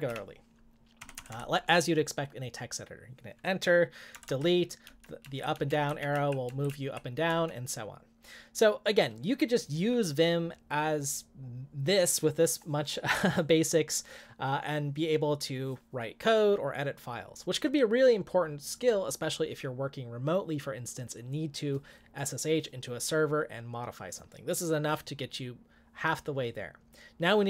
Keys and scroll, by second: 0.0-1.6 typing, 4.2 BackSpace, 4.2 BackSpace, 4.9 Down, 5.2 Up, 5.5 Down, 5.7 Up, 5.9 Down, 6.1 Right, 6.5 Up, 6.7 Right, 7.3 Down.